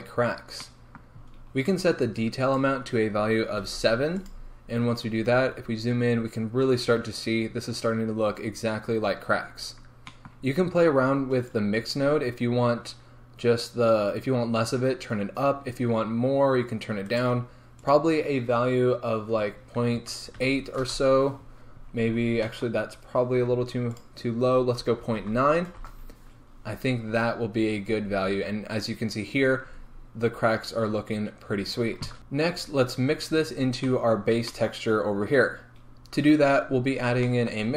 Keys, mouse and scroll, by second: 5.1 scroll up 1, 8.1 scroll down 1, 11.8-17.4 drag, 17.4 right click, 20.8-37.7 drag, 21.0 Return, 26.0 Return, 27.1 scroll down 1, 27.9 scroll up 1, 30.9 scroll down 1.